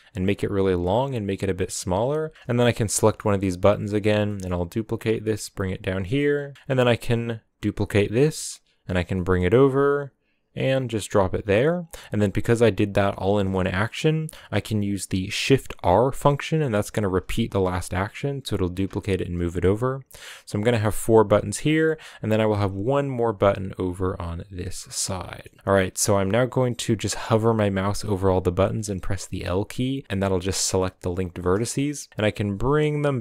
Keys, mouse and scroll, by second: 0.9-2.3 typing, 2.5 right click, 2.9 shift+middle click, 3.3-3.9 scroll down 1, 3.9 shift+d, 5.9 g, 6.5 g, 8.1 shift+d, 17.1 shift+r, 18.8 shift+r, 21.3 shift+d, 24.8 scroll down 2, 25.0-27.7 middle drag, 27.7-31.0 typing, 31.3 scroll down 1, 31.4 middle click, 32.0 g.